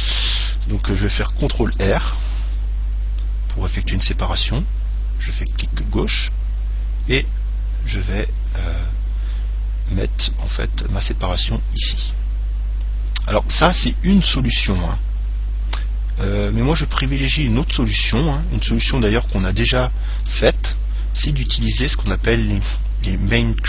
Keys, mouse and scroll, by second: 1.9 ctrl+r, 19.9 ctrl+z, 21.1-21.7 scroll up 1, 21.7-23.6 middle drag.